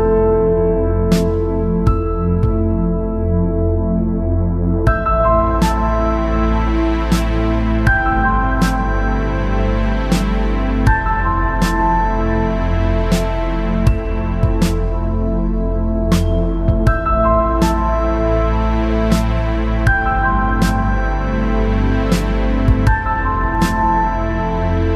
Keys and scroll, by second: 14.2-15.0 space.